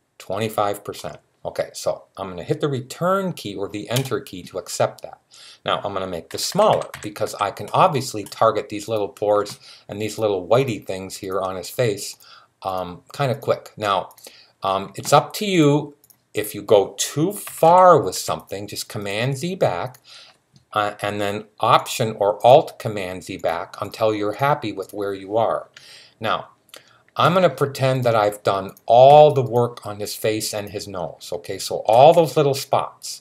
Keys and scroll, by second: 6.1-7.0 typing, 17.3-17.9 typing.